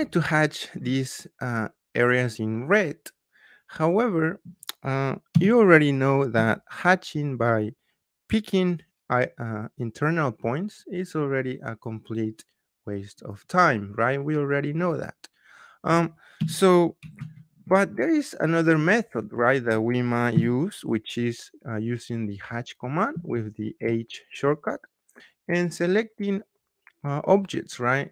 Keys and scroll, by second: 5.3 h, 6.3 Return, 16.4 Escape, 17.1 ctrl+z, 20.3 h, 23.1 Return.